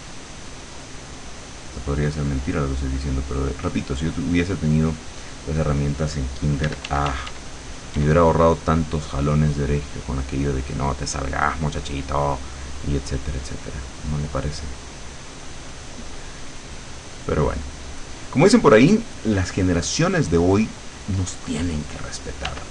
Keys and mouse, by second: 3.8 click, 5.2 click, 6.7 d, 8.0 d, 8.5-12.8 drag, 13.0-19.0 drag, 22.5 w.